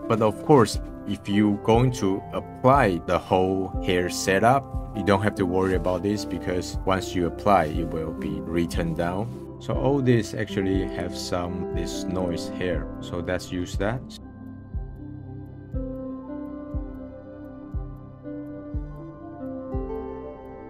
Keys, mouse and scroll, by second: 9.4-10.9 middle drag, 10.9 click, 11.6-12.1 middle drag, 12.1 click, 12.8 x, 13.4-13.8 middle drag, 13.8 shift+a, 14.1 click, 14.7 click, 15.0 click, 15.6 scroll down 1, 15.9 click, 16.5 click, 16.7 scroll up 1, 17.0 click, 17.1 middle click, 17.6 click, 18.0 middle click, 18.1 click, 18.2 scroll down 5, 18.4 click, 18.8 click, 19.7 click, 20.3 click, 20.6 scroll up 5.